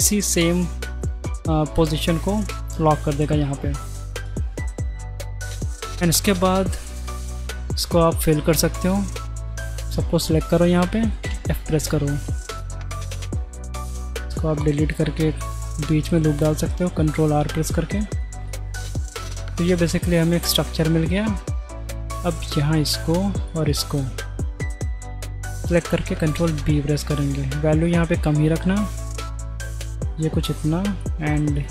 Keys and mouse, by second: 5.0 click, 6.3 middle click, 7.6 shift+right click, 8.3 middle click, 11.2 f, 11.7 middle click, 12.3 z, 13.3 2, 14.2 ctrl+x, 15.4 ctrl+r, 16.0-17.0 middle drag, 17.7 middle click, 18.4-19.0 middle drag, 19.2 Tab, 20.2 click, 20.8 Tab, 22.7 alt+click, 23.4 alt+shift+click, 25.9 ctrl+b, 30.3-30.7 drag, 31.5 shift+click.